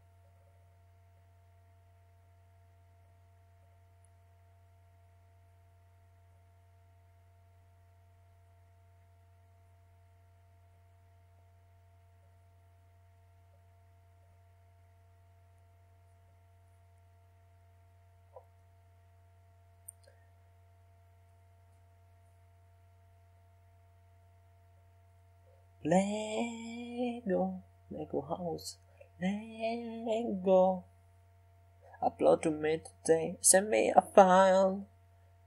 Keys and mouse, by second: 0.0-1.8 middle drag, 1.8 s, 2.9-6.3 drag, 4.8 s, 6.8 middle click, 8.8 Tab, 10.2 f, 12.4 s, 14.8-18.2 drag, 21.2 e, 23.1 s, 24.3 e, 26.0 s, 27.3 s, 28.5 Tab, 30.2-33.5 drag, 33.5 r.